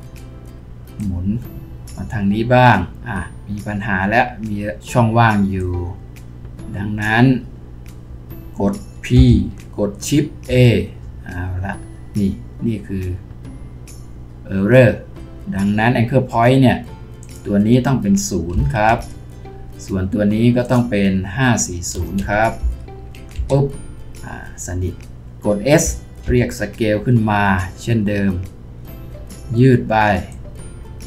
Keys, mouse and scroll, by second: 9.1 p, 10.5 shift+a, 18.5 0, 18.9 Return, 21.9-22.6 typing, 23.3 Return, 26.2 typing, 29.1-31.0 scroll down 1.